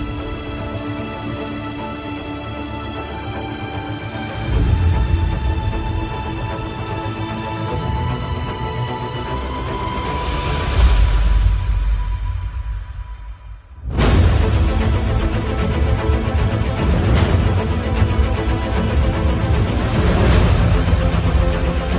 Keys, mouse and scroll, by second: 8.7 alt+click, 17.8-21.9 alt+drag.